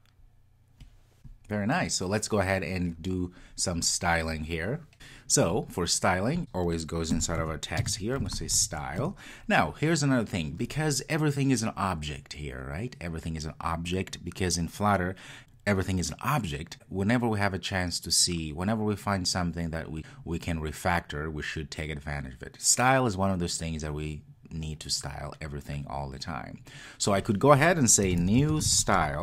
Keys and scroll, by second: 9.0 Return.